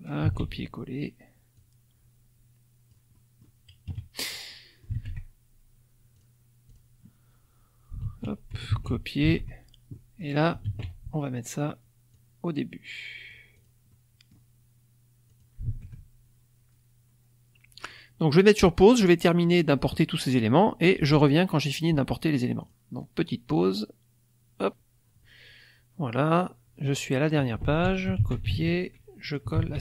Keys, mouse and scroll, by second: 0.2 ctrl+v, 1.5-3.0 drag, 3.1 click, 3.8 KP_Subtract, 4.5 click, 4.9 alt+Tab, 6.1 click, 6.6 click, 8.0 ctrl+a, 8.7 ctrl+c, 9.3 ctrl+alt+Tab, 9.9 alt+click, 10.6 ctrl+v, 12.1-13.4 drag, 13.5 click, 13.8 middle click, 15.2 alt+click, 15.7 alt+Tab, 17.2-17.5 scroll down 2, 22.6 click, 24.5 click, 26.2 click, 27.6 ctrl+a, 28.1 ctrl+c, 28.6 ctrl+alt+Tab, 29.2 ctrl+click, 29.5 ctrl+v.